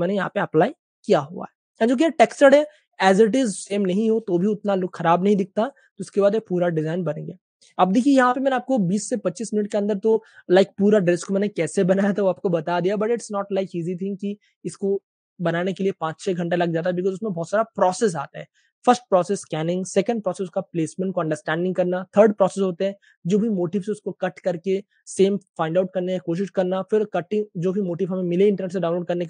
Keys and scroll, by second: 2.8 space, 4.6 super+space, 6.1 typing, 8.0-8.8 typing.